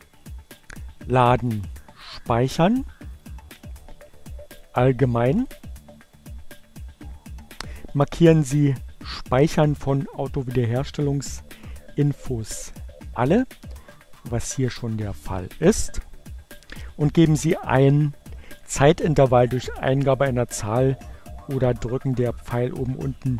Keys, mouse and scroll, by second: 0.7-1.9 drag, 2.8 click, 5.3 click.